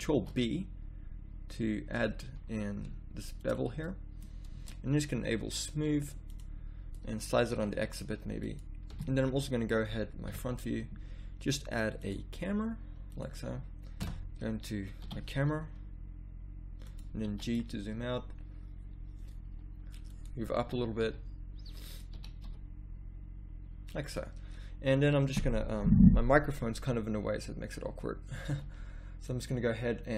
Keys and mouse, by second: 0.1 ctrl+b, 3.9 middle click, 4.5 Tab, 7.0-8.4 drag, 7.5 s, 8.9 a, 10.3 KP_1, 14.0 KP_0, 15.0 g, 17.2 g, 20.6 g, 22.1 r, 28.4 ctrl+b.